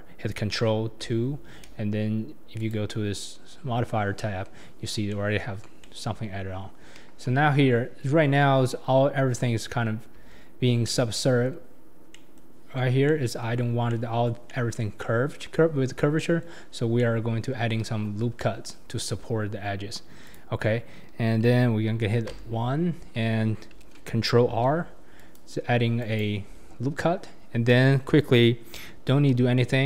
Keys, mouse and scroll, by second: 1.1 ctrl+2, 2.6 click, 5.1-6.9 middle drag, 7.8 scroll up 1, 10.2 Tab, 10.6 scroll down 2, 10.8-11.7 middle drag, 11.7-12.1 scroll up 5, 12.1-13.7 middle drag, 13.7 scroll down 1, 13.9-16.7 middle drag, 16.7-17.0 scroll down 1, 17.0-17.7 middle drag, 17.7 KP_1, 18.1-19.2 scroll down 7, 19.2-20.2 scroll up 3, 20.2 click, 22.0 1, 22.3 1, 24.5 ctrl+r.